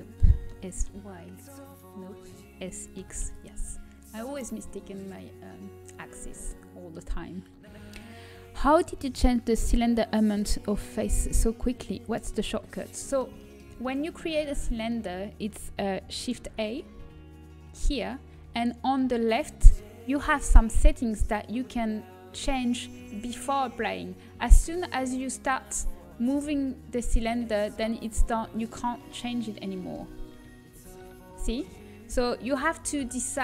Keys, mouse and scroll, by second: 1.6 s, 3.8 s, 14.2-17.7 middle drag, 17.7 shift+a, 21.0-25.1 middle drag, 25.1-27.0 right drag, 27.0 s, 29.8 Tab, 30.6 Tab, 32.9 l.